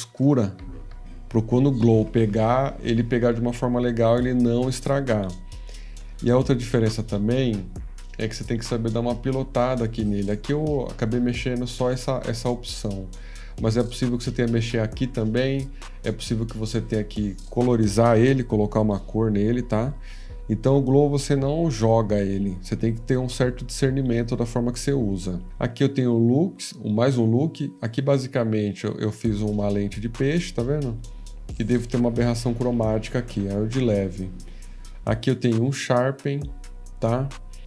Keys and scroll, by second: 6.0 F14, 6.0 /, 18.2 F13, 19.6 F18.